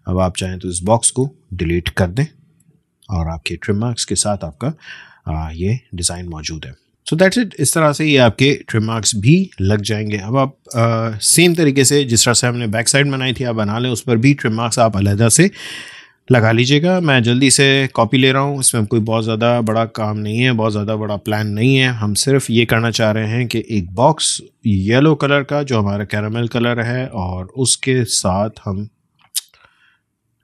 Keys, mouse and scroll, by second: 2.5 BackSpace, 4.7-5.2 alt+scroll down 1, 5.2-6.2 alt+scroll up 1, 6.2-6.5 alt+scroll down 1, 6.9 space, 7.2 alt+scroll up 1, 7.8-8.4 alt+scroll down 1, 9.3 space, 9.5 click, 9.8 space, 12.8 alt+scroll down 1, 13.4 space, 13.5 click, 13.8 space, 16.4-21.5 drag, 21.5 BackSpace, 23.2 click, 25.7-30.1 drag.